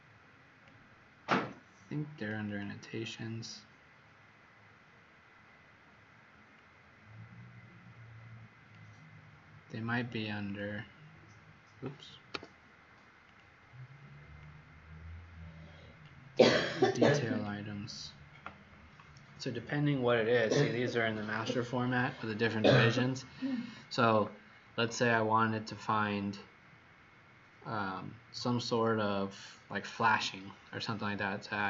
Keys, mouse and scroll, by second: 2.4 click, 6.5 click, 12.2 Escape, 13.2 click, 17.2 click.